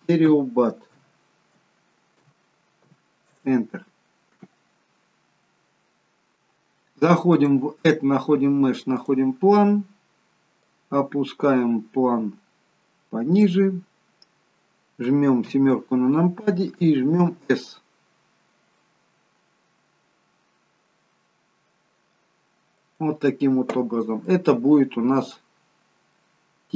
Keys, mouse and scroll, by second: 7.5 click, 10.7 click, 15.4 KP_7, 17.2 s, 23.9-25.6 scroll down 4, 24.3 middle click.